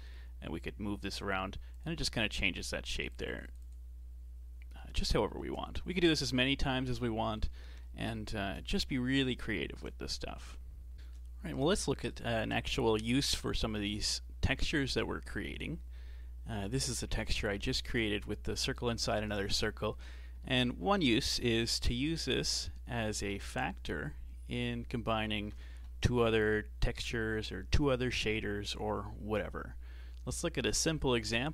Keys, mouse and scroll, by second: 1.2 click, 2.9-5.5 drag, 5.9-6.5 scroll down 3, 7.1-8.5 shift+middle drag, 8.5-9.5 scroll up 4, 9.5 shift+middle click, 10.1-10.9 scroll down 2, 10.9-11.8 shift+middle drag, 11.8-14.9 scroll down 2, 19.9-20.4 scroll up 4, 20.4-24.1 shift+middle drag, 24.1 click, 30.2 shift+a.